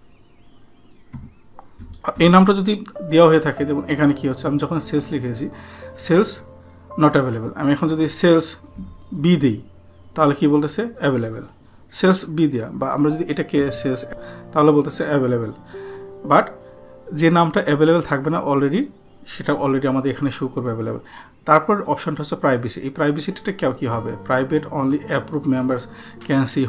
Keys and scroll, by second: 14.1 shift+b.